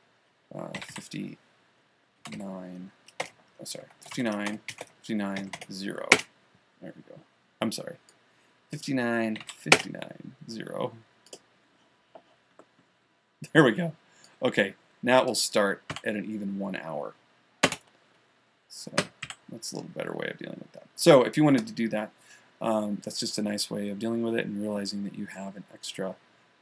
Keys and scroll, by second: 0.9-3.6 typing, 5.1-6.5 typing, 6.6 Return, 9.6-10.4 typing.